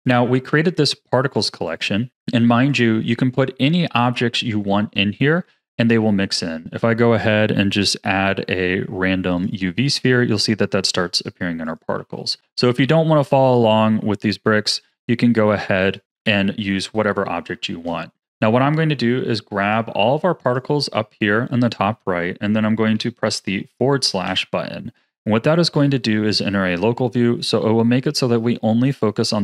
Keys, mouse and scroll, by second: 0.0 click, 1.6 click, 2.6 click, 7.6 shift+a, 11.6 click, 11.9 x, 13.4-14.4 middle drag, 14.4-15.5 scroll up 8, 15.5-16.1 shift+middle drag, 16.1 KP_7, 16.9-17.3 scroll down 3, 17.3-19.6 shift+middle drag, 19.6 click, 20.5-23.4 shift+drag, 24.2 KP_Divide, 25.6-26.4 scroll down 13, 26.4-29.4 middle drag.